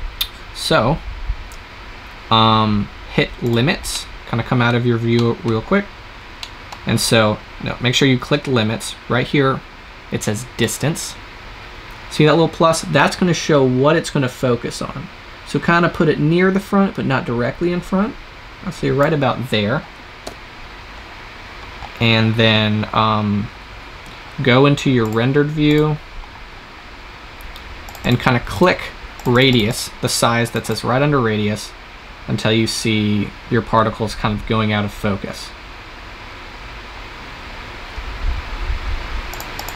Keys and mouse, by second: 3.3 click, 5.2 click, 10.5-12.3 drag, 20.1 KP_0, 24.9-26.6 drag, 31.1-33.0 drag.